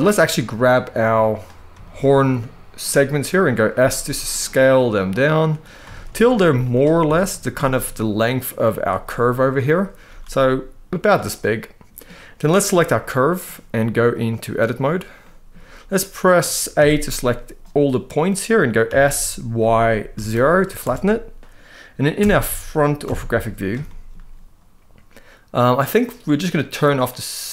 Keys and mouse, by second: 1.5 shift+middle click, 2.5 middle click, 3.5 s, 5.6 shift+middle drag, 6.2 z, 6.8 shift+middle click, 7.3-7.6 middle drag, 9.4 click, 9.8 s, 11.1-11.7 middle drag, 12.7-13.1 middle drag, 13.9 click, 14.9 middle click, 16.5 a, 18.6 s, 19.3 y, 19.9 0, 20.5 Return, 22.8 KP_1, 23.6 shift+middle click.